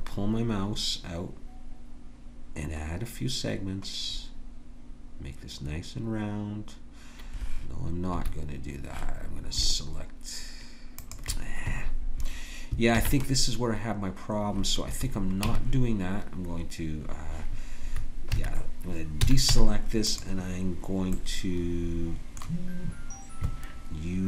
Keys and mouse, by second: 11.0-12.9 drag, 12.9 ctrl+b, 15.4 Tab, 19.2 a, 19.5 Tab.